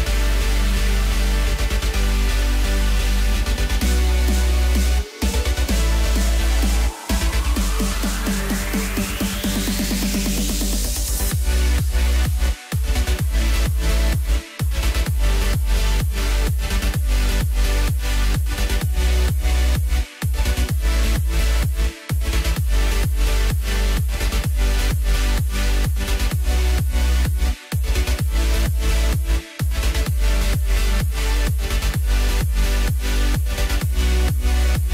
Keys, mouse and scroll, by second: 3.8-4.8 drag, 4.8 Tab, 5.2-6.5 middle drag, 6.5 Tab, 8.1 click, 9.1 3, 9.3 click, 10.1 KP_1, 11.1-11.6 scroll up 1, 11.6-12.6 middle drag, 12.6 a, 13.7 KP_1, 14.3 e, 16.0 middle click, 16.5 click, 16.8-17.5 scroll up 1, 17.5 e, 26.6-28.1 scroll up 1, 28.1 ctrl+b, 30.6 middle click, 31.0-31.5 scroll up 2, 31.5 click, 31.9 scroll up 2, 32.4 x, 34.2 2.